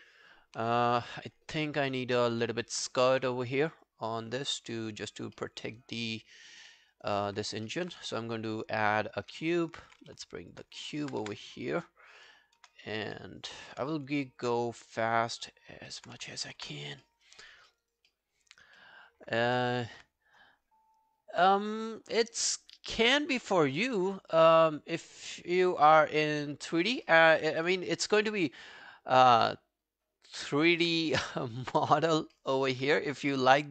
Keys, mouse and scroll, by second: 0.1-1.3 scroll down 1, 1.3 scroll down 1, 1.6 alt+middle click, 1.9 alt+right click, 2.1 alt+click, 2.5 alt+middle click, 3.5 alt+middle click, 3.9 alt+click, 5.4 alt+middle click, 5.7 alt+click, 6.7 alt+middle click, 7.0 alt+right click, 7.2 alt+click, 7.7 alt+middle click, 8.4 shift+right click, 9.5 alt+scroll down 1, 9.7 alt+click, 10.0 w, 11.0 alt+middle click, 11.3 space, 12.6 space, 13.2 alt+middle click, 13.4 alt+right click, 14.3 alt+middle click, 14.7 w, 15.7 alt+scroll up 3, 15.9 alt+middle click, 16.2 space, 16.6 space, 17.1 alt+middle click, 17.3 alt+right click, 17.5 alt+click, 17.9 alt+right click, 18.1 alt+middle click, 18.5 alt+scroll up 1, 18.8 alt+middle click, 22.0 scroll down 1, 25.8 scroll down 5, 27.1 alt+middle click, 27.4 alt+right click, 28.9 alt+click, 30.5 alt+click, 32.4 alt+middle click, 32.6 alt+right click, 33.3 r.